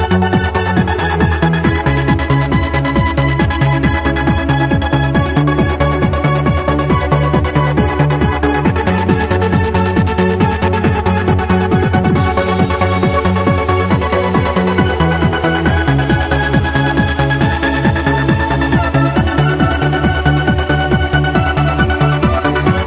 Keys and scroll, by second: 4.9 q, 6.1 w, 8.7 q, 12.8 q, 13.9 w, 16.9 q.